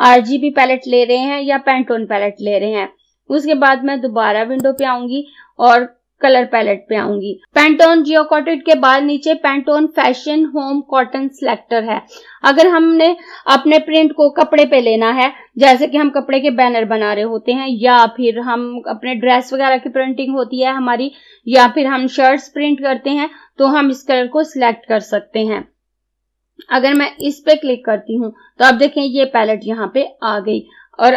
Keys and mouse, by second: 4.6 click, 27.0 click.